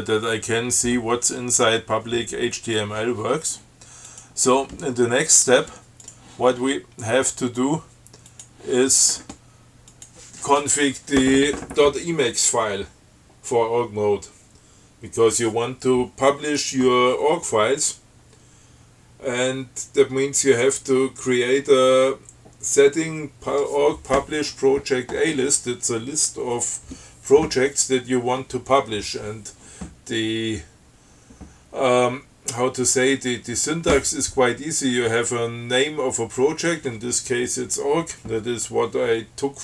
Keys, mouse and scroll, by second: 4.3 click, 6.3 click, 8.5 click, 10.1 click.